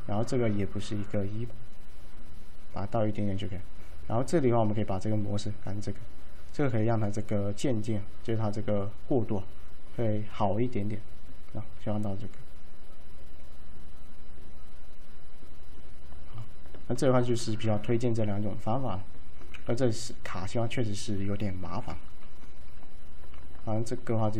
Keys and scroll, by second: 19.7 w, 21.8 p.